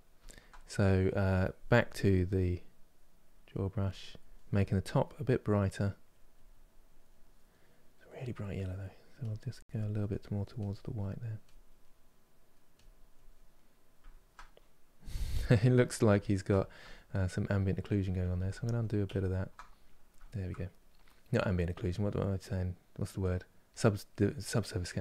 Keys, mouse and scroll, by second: 1.6 click, 2.0 middle click, 2.7-4.2 drag, 4.2-5.9 middle drag, 5.9-6.9 drag, 7.9 click, 8.5-10.3 middle drag, 10.3 click, 10.6 middle click, 11.2 click, 11.4-12.5 middle drag, 12.5 click, 13.2-18.0 middle drag, 18.0 ctrl+z, 18.3 ctrl+z, 19.3-23.3 middle drag, 23.3-25.0 drag.